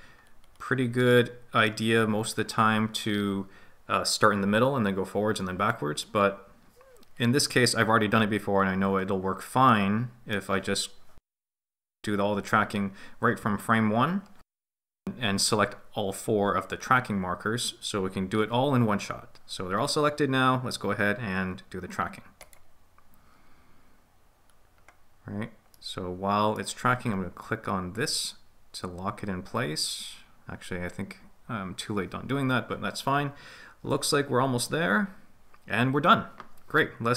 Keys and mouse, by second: 1.1 middle click, 9.8 middle click, 22.4-23.3 drag, 23.6 click, 24.7-27.2 drag, 27.4-31.3 drag, 31.4-35.1 drag.